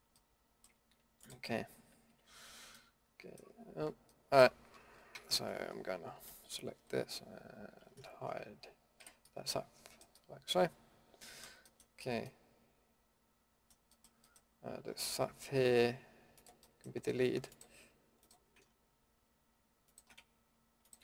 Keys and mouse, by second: 0.4 middle drag, 2.1 KP_Decimal, 2.7-3.1 middle drag, 5.1 a, 6.2 l, 6.7 l, 9.0 h, 14.0-16.3 middle drag, 16.3-21.0 drag.